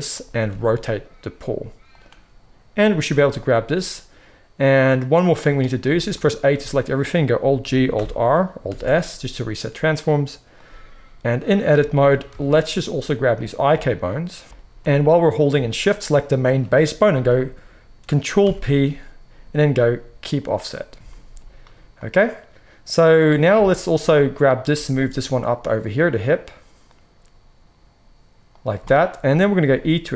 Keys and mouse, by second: 0.4 r, 2.7 click, 2.8-10.4 middle drag, 2.9 g, 6.4 a, 7.7 alt+g, 7.8 alt+r, 8.5 alt+s, 10.4-13.3 drag, 12.2 alt+a, 13.3 shift+middle click, 14.0 shift+click, 14.1-15.9 shift+middle drag, 15.9 shift+click, 16.0-30.1 shift+middle drag, 18.5 ctrl+p, 24.6 g, 29.6 e.